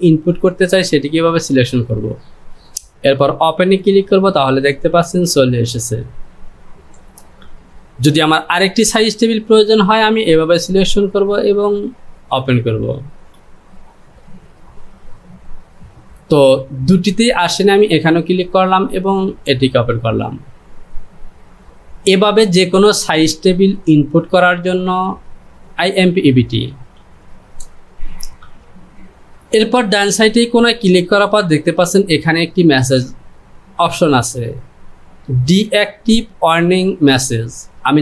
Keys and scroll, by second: 0.0-0.8 typing.